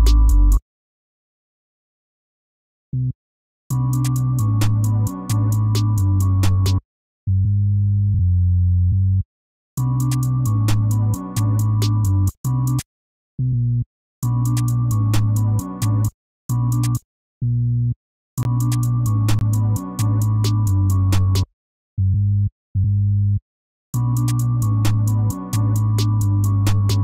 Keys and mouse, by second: 0.1 F1, 3.3 F1, 6.1 F1, 11.8 F1, 20.1 F1, 20.2 F1, 23.5 F1.